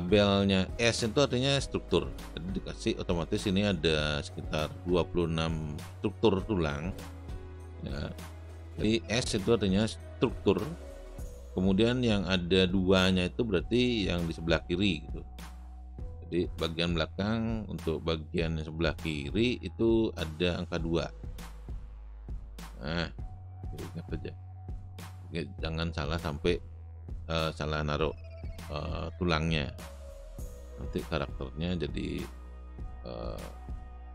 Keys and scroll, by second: 26.7 space, 33.1 space.